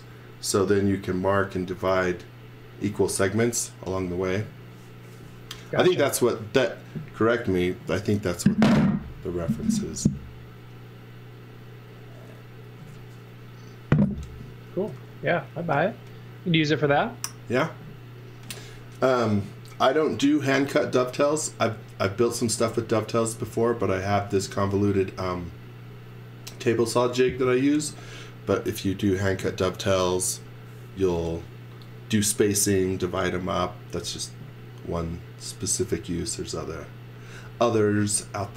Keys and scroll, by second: 15.7 z, 22.5 z, 24.2 x, 26.7 space, 37.8-38.5 typing.